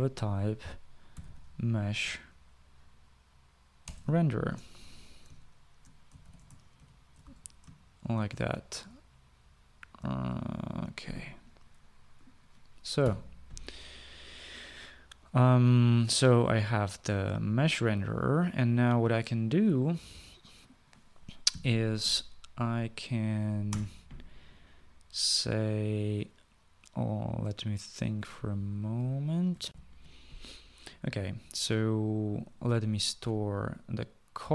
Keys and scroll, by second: 0.0-2.3 typing, 3.9-4.9 typing, 6.3-9.0 typing, 10.3 BackSpace, 13.1-13.8 typing, 21.8 typing, 24.0 Return, 30.1 shift+F9, 30.2 shift+F9.